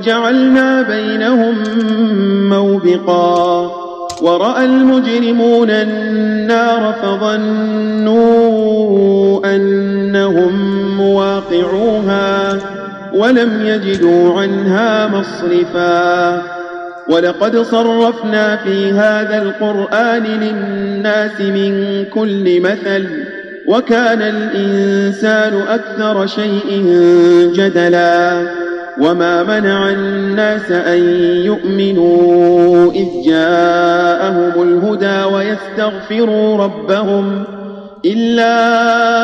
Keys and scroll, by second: 13.8 Tab.